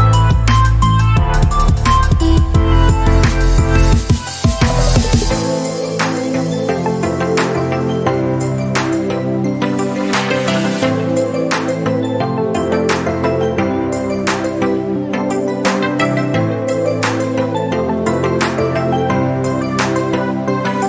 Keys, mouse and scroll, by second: 0.1 super+click, 1.1 alt+space, 1.3-2.2 click, 4.6 typing, 4.8 alt+click, 8.2 alt+click, 16.6-20.8 alt+drag.